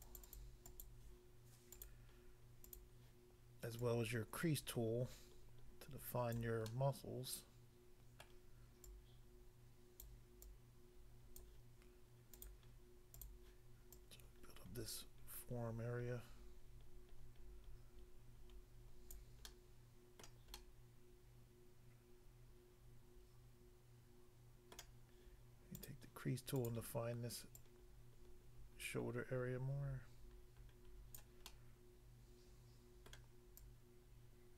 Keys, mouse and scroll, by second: 0.0 double click, 0.6 double click, 0.9 double click, 1.7 double click, 1.8 double click, 2.7 click, 2.8 click, 3.8 click, 6.4 click, 6.7 middle click, 8.3 middle click, 8.9 click, 10.1 click, 10.4 click, 11.3 click, 12.3 click, 12.4 click, 13.2 click, 13.9 click, 19.1 click, 19.5 middle click, 20.2 middle click, 20.5 middle click, 24.8 middle click, 25.8 click, 25.9 click, 26.5 click, 27.6 click, 31.2 click, 31.5 middle click, 33.1 middle click, 33.6 click.